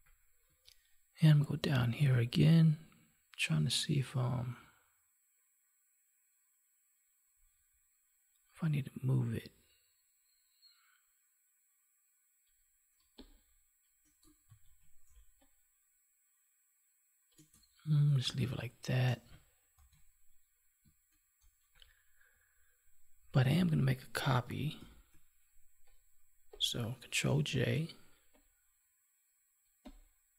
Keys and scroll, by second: 14.3 ctrl+z, 19.7 ctrl+s, 24.7 ctrl+j, 27.4 ctrl+j.